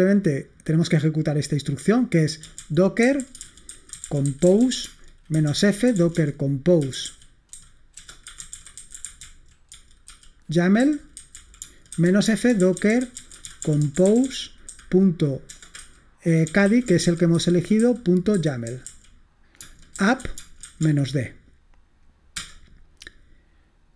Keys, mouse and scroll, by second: 1.3-2.3 drag, 2.3-21.4 typing, 22.4 Return.